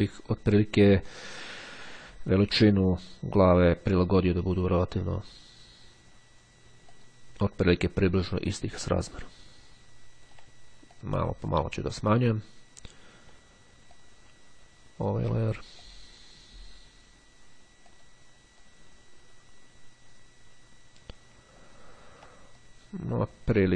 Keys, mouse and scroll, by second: 1.6-4.6 drag, 7.0 click, 8.5-10.8 ctrl+drag, 11.0 click, 14.0-15.7 ctrl+drag, 15.9 click, 18.0 click, 18.7-21.7 drag, 21.7-22.2 ctrl+scroll up 2, 22.6-23.7 ctrl+drag.